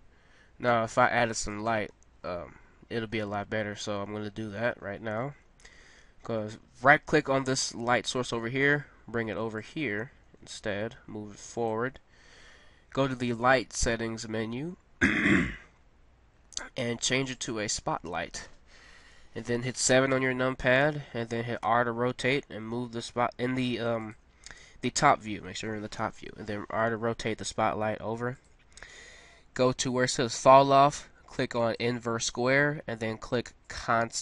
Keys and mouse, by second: 1.5-2.9 right drag, 8.7 g, 10.8 g, 13.2-14.4 drag, 19.1 KP_7, 21.6 r, 26.1 KP_1, 27.8 r, 31.6-33.3 drag.